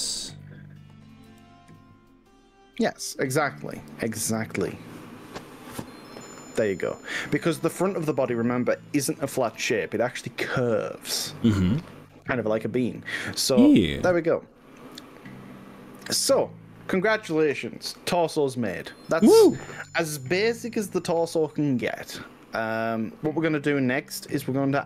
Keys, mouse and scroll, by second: 1.3 g, 3.8 y, 9.2 click, 9.7 click, 10.2-18.5 middle drag, 20.5-24.8 middle drag.